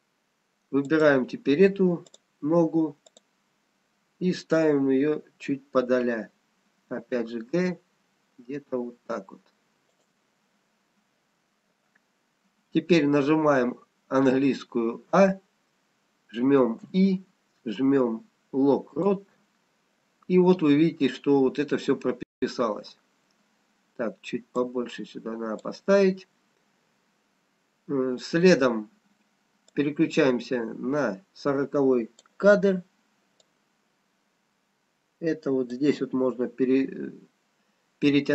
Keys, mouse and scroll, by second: 1.1 click, 2.2 click, 7.1 g, 15.8 a, 17.2 i, 24.6 click, 29.8 click, 33.6 click.